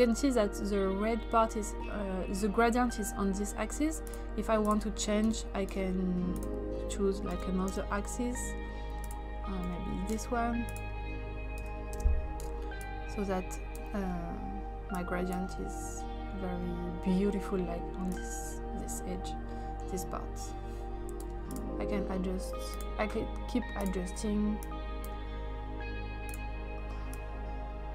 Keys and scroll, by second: 5.3 0, 7.3 1, 7.7 Return, 9.7 1, 11.4-12.1 typing.